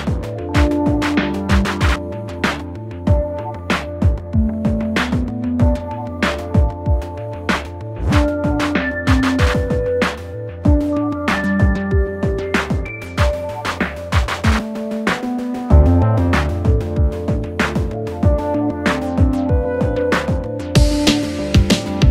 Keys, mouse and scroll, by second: 5.7-16.7 alt+drag, 16.7 right click, 19.5 click, 21.9-22.1 drag.